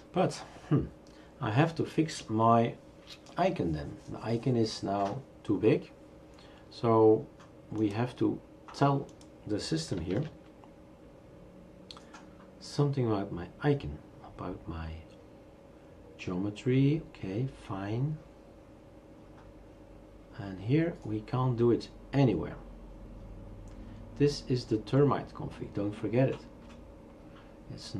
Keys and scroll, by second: 10.1 shift+super+q.